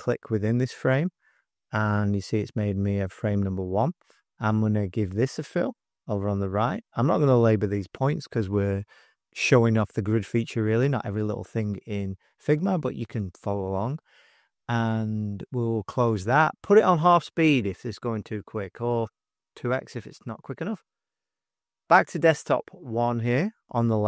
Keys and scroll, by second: 2.3 typing.